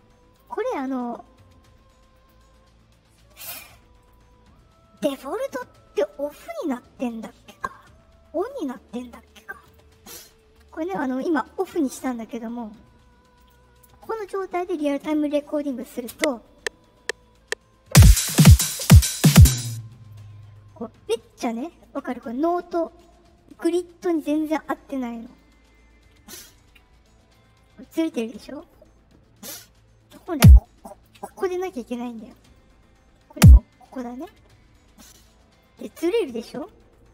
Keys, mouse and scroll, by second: 0.2 click, 2.1 click, 3.2 click, 3.9 right click, 5.0 click, 5.9 right click, 9.6 click, 10.3 right click, 11.7 right click, 13.3 click, 16.0 space, 19.5 space, 22.2 middle click, 22.2-22.7 scroll up 2, 25.3 middle click, 30.3 click, 32.3 middle click, 33.3 click, 35.1 right click, 36.9 right click.